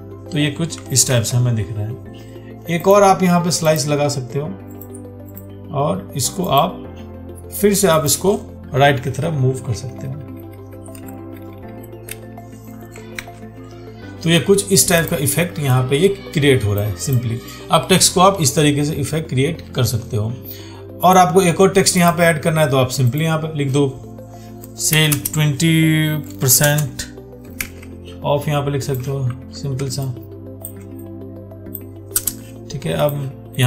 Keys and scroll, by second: 1.3 ctrl+d, 13.4 ctrl+d, 27.9 ctrl+a, 29.5 ctrl+t.